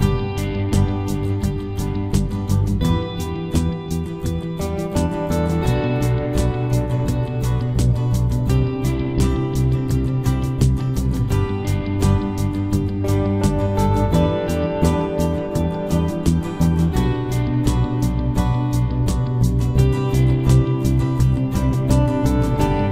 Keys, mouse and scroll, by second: 2.7-4.6 right drag, 4.0 c, 4.7 right click, 5.6 g, 7.2 g, 8.4 g, 9.6 g, 10.2 g, 10.9 b, 11.3 g, 13.9 right click, 15.5 b, 18.0 e, 19.9-21.6 right drag, 20.1 b, 20.4 g, 21.9-22.9 right drag, 22.2 b, 22.6 g.